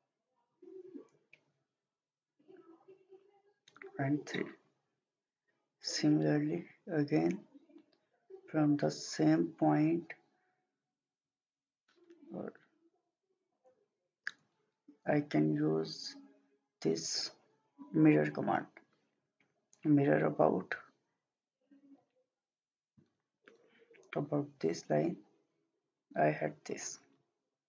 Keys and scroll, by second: 12.5 Escape, 13.4 Escape.